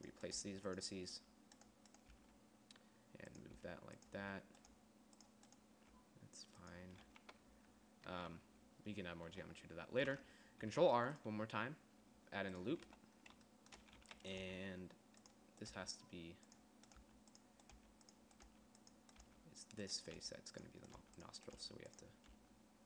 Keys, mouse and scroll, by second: 0.2 g, 1.0 g, 2.7 g, 4.1 g, 5.3 g, 6.1 g, 11.2 ctrl+r, 13.4 z, 14.5 a, 14.9 g, 16.3 g, 17.5-22.8 typing.